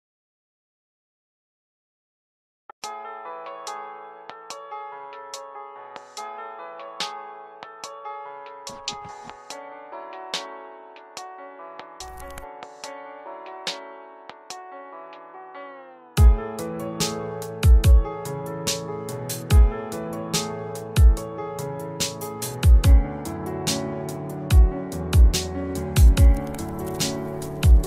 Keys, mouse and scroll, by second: 15.5 click, 17.3-20.2 scroll up 1, 20.2 click, 23.8-27.8 drag.